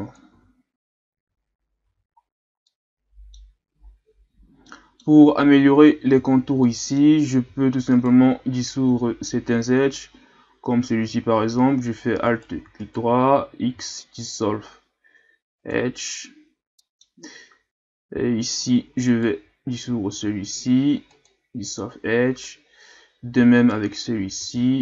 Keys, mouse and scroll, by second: 0.3 z, 0.9 scroll down 2, 1.2 Tab, 1.8 a, 2.2 scroll down 2, 2.6-3.8 middle drag, 3.8-4.7 ctrl+scroll down 3, 4.7-5.2 middle drag, 5.2-6.2 scroll up 3, 6.2 Tab, 6.6-7.9 middle drag, 7.9 alt+right click, 9.0 x, 12.2 right click, 12.8 alt+right click, 13.7 x, 16.8 middle click, 17.3-18.6 scroll up 1, 19.1 alt+right click, 20.1 x, 23.6 alt+right click, 24.4 x.